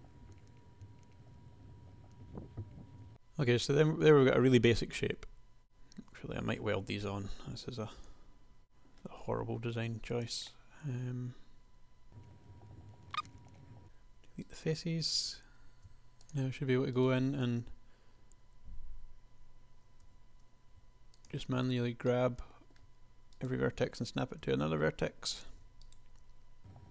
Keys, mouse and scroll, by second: 0.4 middle click, 1.2-2.7 typing, 2.0 Tab, 5.6 Tab, 7.4 KP_1, 8.3 g, 9.5 g, 10.4-12.0 drag, 12.8 e, 12.9 s, 13.7 x, 15.2 g, 16.4 g, 20.1 g, 23.5 click, 24.5 g, 26.6-26.9 typing.